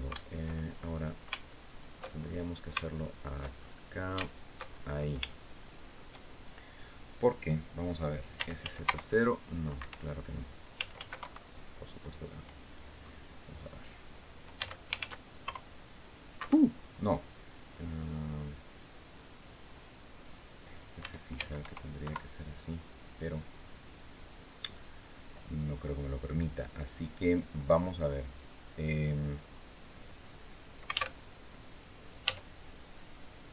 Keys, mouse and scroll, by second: 0.6 shift+right click, 1.1 alt+shift+right click, 1.9-2.3 alt+shift+scroll up 1, 2.6 alt+shift+right click, 3.2 alt+shift+right click, 3.6 scroll up 1, 3.9 alt+shift+right click, 4.4-4.9 alt+shift+scroll down 2, 5.0 shift+middle click, 5.1 shift+click, 5.1 shift+middle click, 8.1 s, 8.3 z, 8.6 KP_0, 9.5 Escape, 10.2-11.2 typing, 12.7 scroll up 1, 14.3 s, 14.7 shift+z, 15.1 shift+KP_0, 16.1 Escape, 20.7 s, 21.1 z, 21.3 KP_0, 21.7 KP_Enter, 26.6-27.0 scroll down 2, 27.2-27.6 scroll up 2, 30.8 alt+w, 31.9 e.